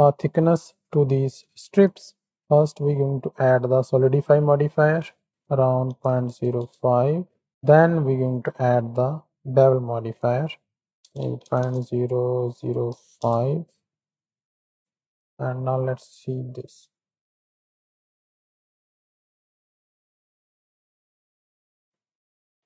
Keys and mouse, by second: 0.1 shift+click, 1.7 click, 2.3-4.2 drag, 5.3-6.5 drag, 7.5 drag, 8.3-10.3 drag, 10.8-13.2 drag, 11.5 KP_0, 15.1 click, 15.2 middle click, 15.5 z, 16.8 click, 19.0 click, 19.0 z, 19.4 z, 20.2 z, 20.8 z, 21.9-22.6 drag.